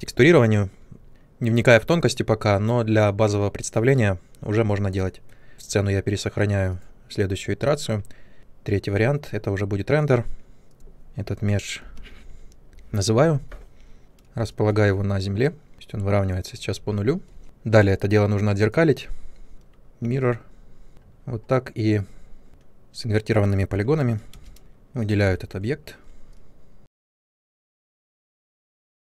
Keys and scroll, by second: 12.7 Return, 15.7 ctrl+1, 24.3 space, 25.2 e, 27.4 space, 27.5 w.